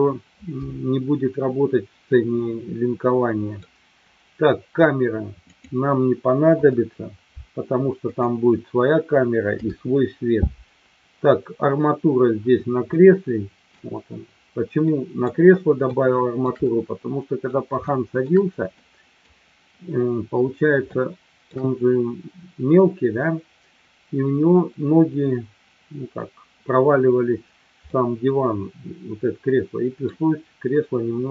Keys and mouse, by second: 2.0-3.5 middle drag, 6.6 Delete, 9.6 Delete, 13.0 middle click, 14.9 middle drag, 15.9-16.5 shift+middle drag, 16.7-17.4 middle drag, 17.9 shift+middle click, 18.9 middle click, 20.8-21.5 shift+middle drag, 27.9-30.0 middle drag.